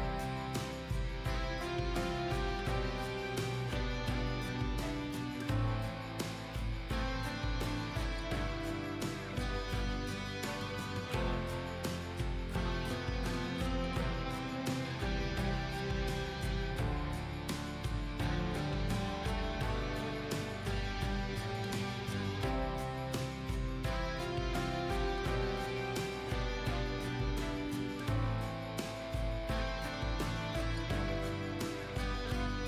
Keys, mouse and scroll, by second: 0.1 alt+scroll up 1, 2.2-17.8 drag, 17.9 alt+scroll down 1, 18.5 alt+scroll down 1, 22.2 click, 23.0 alt+scroll down 1, 23.9 click, 24.9 alt+scroll down 1, 25.6 alt+scroll up 1, 26.2-28.1 drag, 28.9 alt+scroll down 1, 29.5 alt+scroll up 1, 29.9 alt+scroll down 1, 30.5 alt+scroll up 1, 31.1 click, 32.0 alt+scroll down 1.